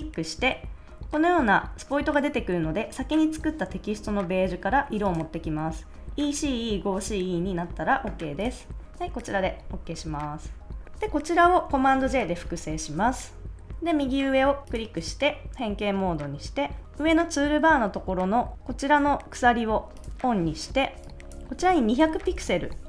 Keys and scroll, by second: 11.9 super+j, 21.8-22.7 typing.